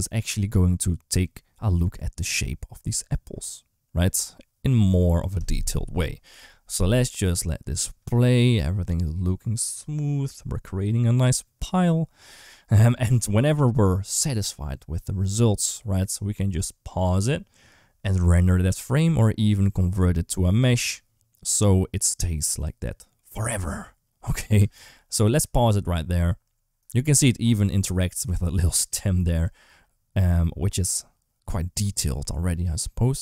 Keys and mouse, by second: 24.8 space, 29.5 space.